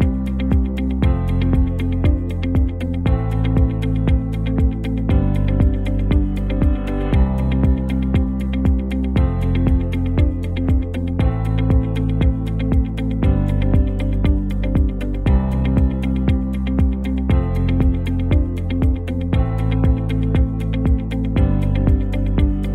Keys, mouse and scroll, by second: 1.3 click, 2.9 p, 4.0 alt+scroll up 1, 4.8 space, 4.9-5.6 click, 5.2 space, 7.0 click, 8.9 ctrl+z, 9.3 shift+click, 9.8 space, 9.9-10.4 click, 10.2 space, 10.8 click, 13.4 click, 14.4 shift+click, 17.1 space, 17.2-18.0 click, 17.6 space, 20.2 click, 20.8 shift+click, 21.8 shift+click, 22.4 ctrl+z.